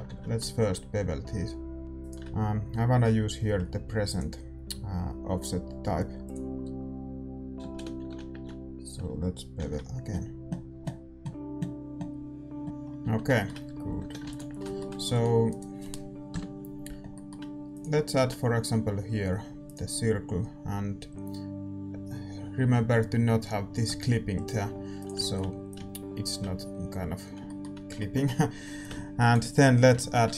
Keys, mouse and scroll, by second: 7.6 ctrl+z, 9.5 ctrl+g, 9.5 ctrl+b, 12.6 Tab, 12.6-19.7 middle drag, 12.6 a, 13.7 a, 14.0 a, 14.6 ctrl+s, 15.4-17.7 right drag, 16.3 KP_7, 17.7-19.7 drag, 19.7 shift+a, 23.8 s, 25.2 middle click, 25.6-27.4 drag, 27.4-29.9 middle drag, 28.8-30.3 drag, 29.6 f, 29.9 a, 30.2 Tab.